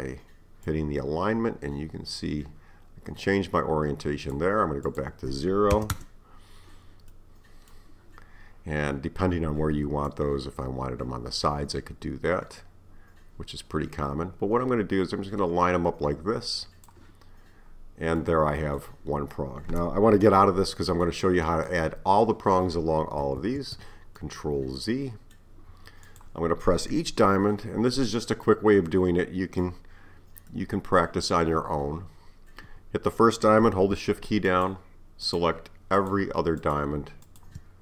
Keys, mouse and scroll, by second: 0.7-3.7 drag, 4.9-7.2 drag, 7.2-10.1 middle drag, 10.1-13.1 drag, 17.7-18.2 scroll down 2, 18.2-23.2 middle drag, 23.4 z, 24.2-26.1 middle drag, 26.1 click, 27.7-28.5 scroll down 2, 28.5-33.6 middle drag, 34.5 shift+click, 35.2 shift+click, 36.0 shift+click, 36.6 shift+click, 37.3 shift+click.